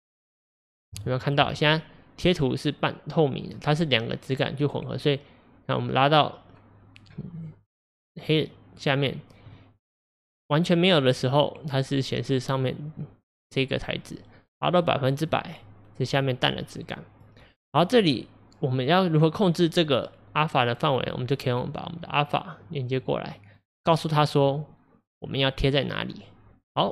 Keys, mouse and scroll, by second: 1.0-5.1 shift+middle drag, 5.1-8.0 drag, 14.4-23.6 drag.